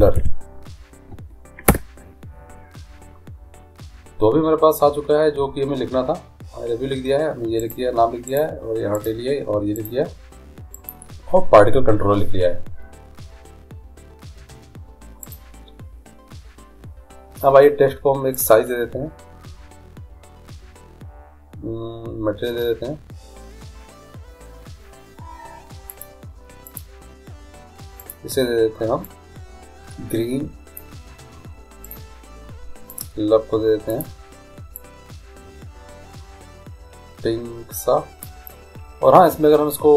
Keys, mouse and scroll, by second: 0.0 l, 7.8-12.7 right drag, 15.5-17.2 right drag, 18.5-20.4 drag, 26.1-30.0 drag, 32.1-33.8 right drag, 33.1-36.0 drag, 39.7-39.9 middle drag.